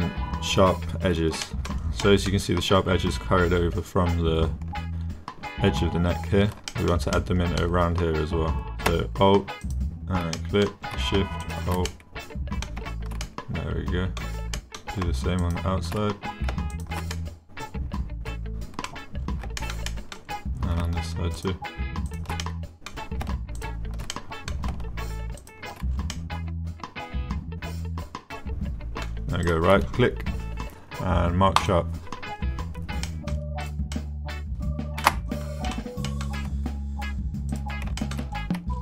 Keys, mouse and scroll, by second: 1.5 shift+middle click, 2.0 middle click, 6.7 shift+click, 7.2 click, 9.7 alt+click, 10.4 click, 11.4 alt+shift+click, 11.9 click, 13.2 click, 13.4 middle click, 13.5 click, 14.6 click, 15.4 alt+shift+click, 17.1-18.5 drag, 18.5 middle click, 18.5 click, 18.7 middle click, 19.6 shift+click, 19.9 click, 22.4 click, 24.1 click, 24.5 middle click, 26.1-28.8 middle drag, 28.8 click, 29.6-31.7 drag, 33.1 middle click, 33.9-35.1 drag, 34.6 middle click, 35.7 click, 36.1 click, 37.5 click, 38.0 shift+middle click.